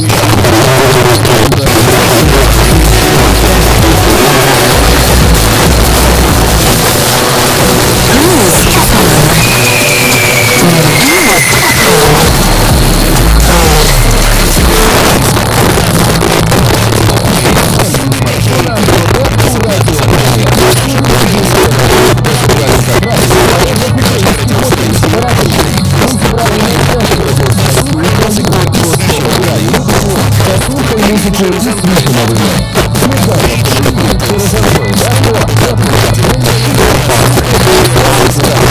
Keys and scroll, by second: 14.9 Page_Down.